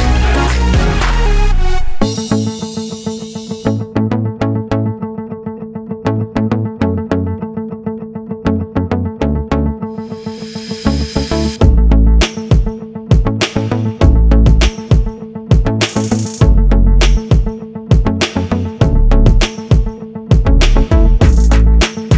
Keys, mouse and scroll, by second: 0.4 click, 3.6 click, 5.0 scroll up 1, 6.3 click, 11.7 click, 12.1 double click, 13.1 click, 15.0 click, 15.9 double click, 17.0 click, 17.2 double click, 17.8 click, 18.0 double click, 19.1 double click, 21.1 click.